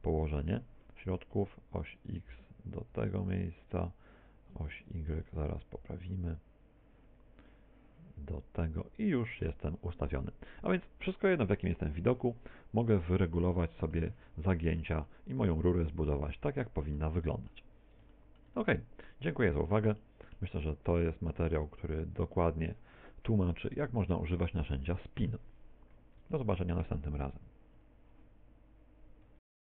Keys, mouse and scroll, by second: 3.9 ctrl+shift+click, 6.9 click, 12.3 middle click, 14.3 z, 14.6 middle click, 15.5 middle click, 16.4 shift+middle click, 16.9 shift+middle click, 17.2 middle click, 17.7-18.2 scroll down 2, 18.1 middle click, 18.5 middle click, 20.9 middle click.